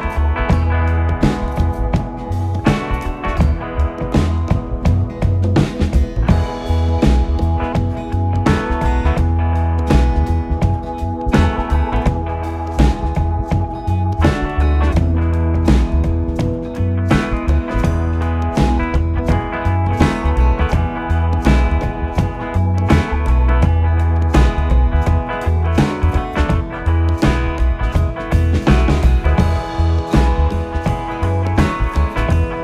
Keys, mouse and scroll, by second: 0.4-5.1 drag, 5.2-7.2 alt+shift+drag, 7.2 r, 11.2 g, 15.4-17.2 alt+drag, 17.2 g, 20.6-21.3 scroll up 2, 21.3-21.6 scroll down 2, 21.6-25.2 middle drag, 25.2 KP_7.